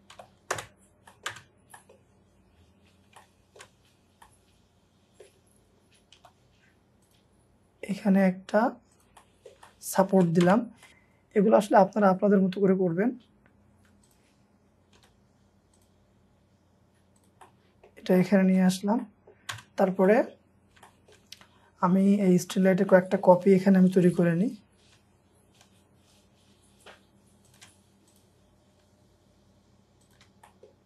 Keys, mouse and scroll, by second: 0.2 typing, 0.6 Return, 1.1 middle click, 1.3 space, 1.5 scroll up 1, 1.7 middle click, 2.1-2.6 scroll down 1, 3.2 shift+middle click, 3.9-4.3 scroll up 1, 6.2 p, 6.5 scroll up 1, 9.2 middle click, 10.5 space, 10.5-10.9 scroll down 4, 10.9 middle click, 11.2 scroll down 1, 13.0 scroll up 1, 13.8 Escape, 15.0 typing, 17.5 middle click, 17.8-18.6 scroll up 2, 18.6 shift+middle click, 19.5 space, 19.8 scroll down 1, 20.1 middle click, 20.5 scroll down 1, 20.9 shift+middle click, 21.3 scroll down 1, 22.9 middle click, 23.4-24.1 scroll down 1, 24.1 typing, 27.5 shift+click, 28.8 shift+click, 30.4 shift+middle click, 30.7 scroll down 1.